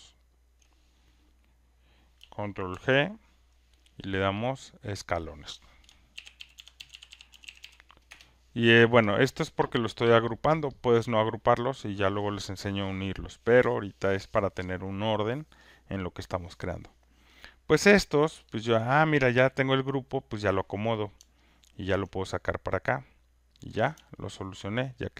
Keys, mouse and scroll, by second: 0.3 shift+click, 2.7 ctrl+g, 4.5 click, 4.8 click, 5.9-9.7 typing, 21.2 alt+click, 23.8 click.